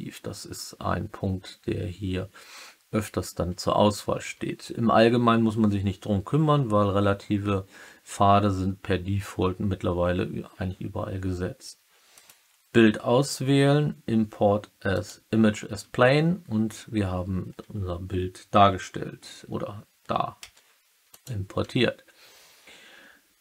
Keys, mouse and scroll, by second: 20.3 s, 21.0 click.